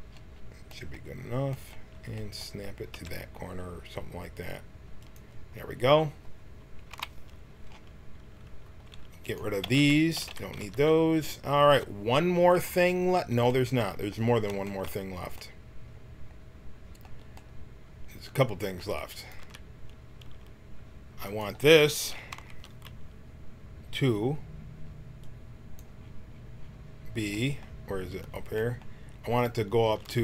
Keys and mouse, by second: 2.9 s, 6.9 KP_1, 9.6 x, 10.3 x, 10.7 Tab, 19.2-22.7 drag, 19.4 Tab, 23.4-25.2 middle drag, 25.7-29.9 drag, 29.9 g.